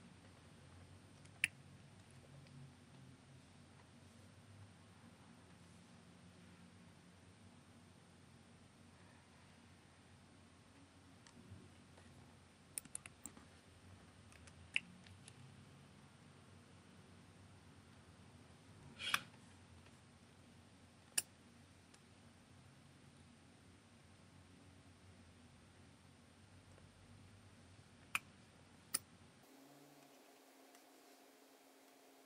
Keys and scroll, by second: 1.2 super+F9, 14.3 super+F9, 19.1 space, 28.1 space.